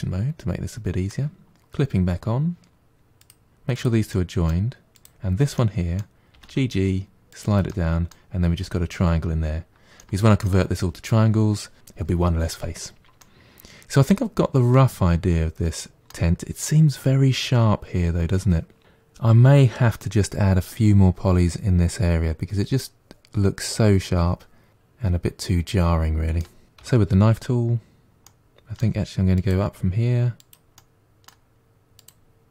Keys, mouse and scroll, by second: 3.1 click, 3.5 g, 3.9 middle click, 4.8 click, 5.4 middle click, 6.2 g, 7.5-11.7 middle drag, 13.0-15.9 middle drag, 24.7 middle click, 26.6-28.1 scroll up 1, 28.1-32.5 middle drag.